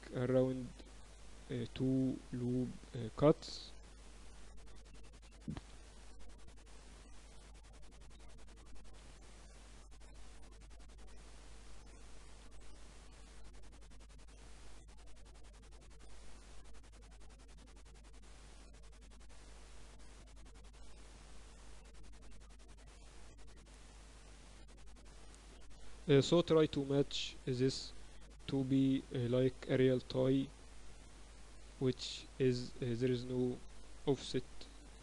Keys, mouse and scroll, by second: 3.9 KP_7, 4.2 KP_8, 5.6 KP_7, 8.2 a, 9.1 b, 10.6-11.8 drag, 11.8 a, 12.5 b, 13.6-15.3 drag, 15.3 a, 16.4 b, 17.7 g, 20.7 e, 22.8-25.1 typing, 23.6 Tab, 25.1 Tab, 28.4-29.5 middle drag, 29.5 click, 31.6-34.0 right drag, 32.8-34.6 drag, 34.4-35.0 right drag.